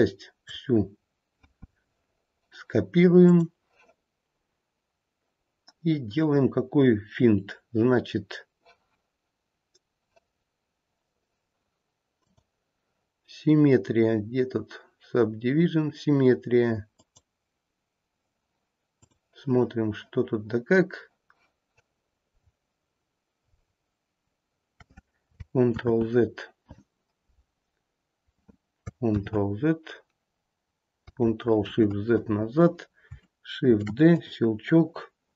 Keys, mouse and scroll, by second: 3.2 click, 12.2 click, 18.9 click, 22.3-22.9 scroll down 1, 22.9-23.7 scroll down 5, 23.3-25.2 scroll up 7, 25.2-25.7 scroll up 1, 25.7 ctrl+z, 29.1 ctrl+z, 31.6 ctrl+shift+z, 33.6 shift+d.